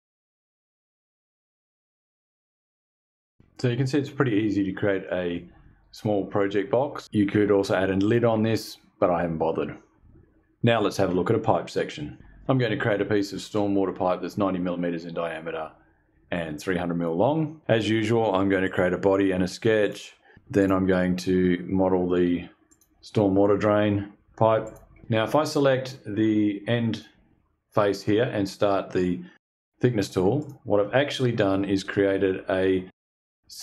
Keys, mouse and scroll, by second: 0.2 click, 0.6 click, 1.1 click, 1.5 click, 2.3 click, 2.5 click, 2.8 click, 3.0 click, 17.8 click, 18.2 click, 18.9 click, 19.3 click, 20.0 click, 20.6 click, 21.1 click, 21.3 click, 21.9 click, 22.4 click, 23.1 KP_9, 23.2 KP_Enter, 24.0 click, 24.5 click, 26.4 click, 29.9 click.